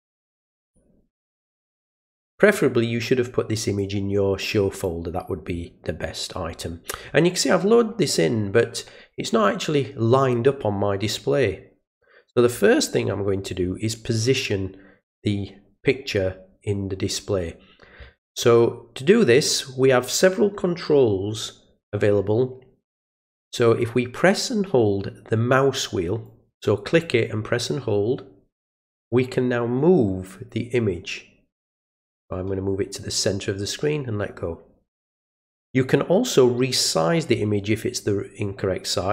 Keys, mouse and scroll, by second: 3.8-4.8 drag, 26.2-33.8 middle drag.